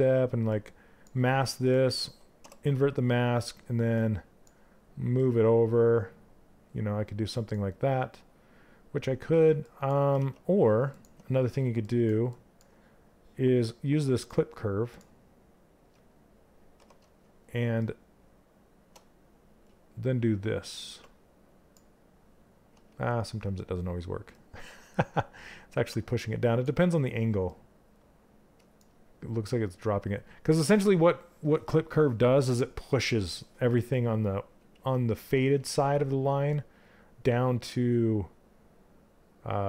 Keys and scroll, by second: 10.6 z, 16.3 q.